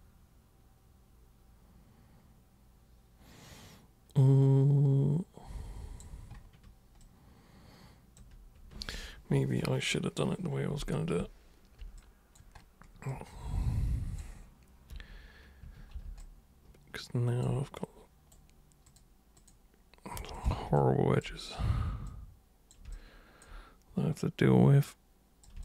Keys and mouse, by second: 7.0-8.2 alt+super+drag, 12.0 alt+super+click, 13.1-14.2 alt+super+drag, 14.9 super+3, 15.6 super+1, 16.2-17.5 alt+super+drag, 17.8 super+right click, 18.9 super+click, 19.4 super+click, 20.4 ctrl+shift+super+click, 20.8 alt+super+click, 22.1 super+click, 23.0-23.4 alt+super+drag, 24.3 super+click.